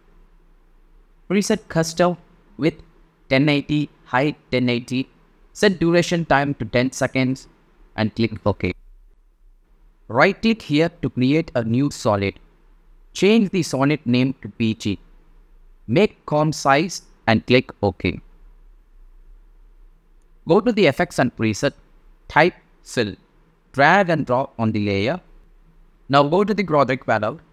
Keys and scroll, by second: 0.0-2.9 typing, 16.0 shift+b, 16.4 shift+g, 22.1-23.2 typing.